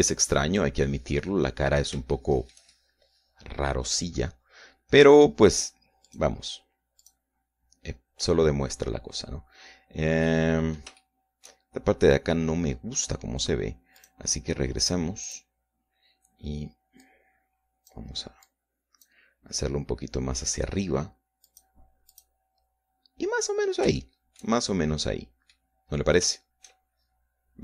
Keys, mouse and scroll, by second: 0.3-2.6 drag, 2.8 scroll up 1, 3.2 shift+middle click, 7.2 click, 11.4 middle click, 15.2 click, 16.4 click, 18.2-19.2 drag, 19.6 click, 22.6 click, 23.3 click, 24.6-25.0 scroll down 1, 25.2 shift+click, 26.2 middle click, 27.0-27.4 scroll up 2, 27.4 shift+middle click.